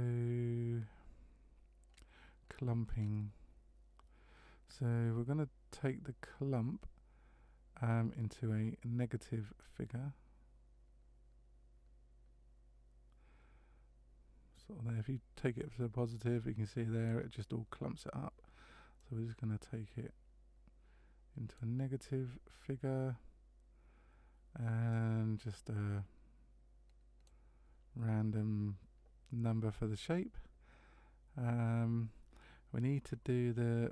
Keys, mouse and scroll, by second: 1.9-3.4 scroll down 7, 9.6 click, 19.0 click, 24.9 click, 33.0-33.4 scroll down 4.